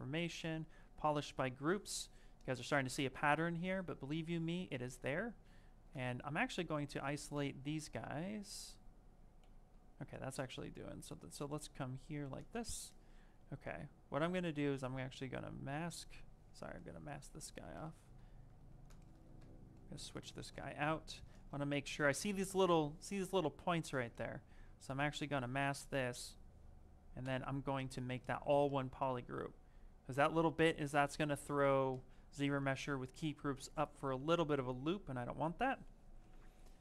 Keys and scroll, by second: 8.1 ctrl+z, 9.3 ctrl+shift+a, 16.2 ctrl+z, 18.5 ctrl+z.